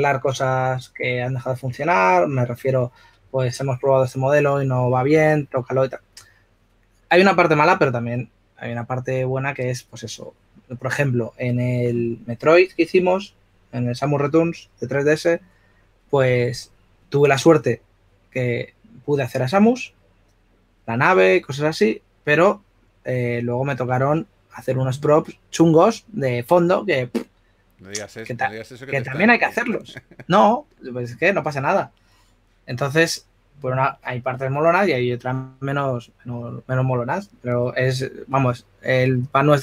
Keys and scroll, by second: 0.0-0.4 typing, 3.0 typing.